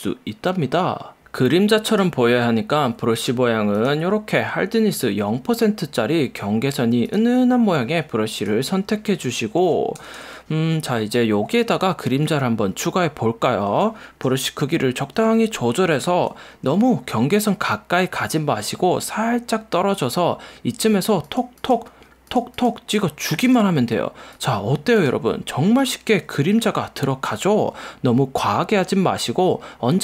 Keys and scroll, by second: 10.1 super+=, 14.7 ], 15.4 ], 15.6 [.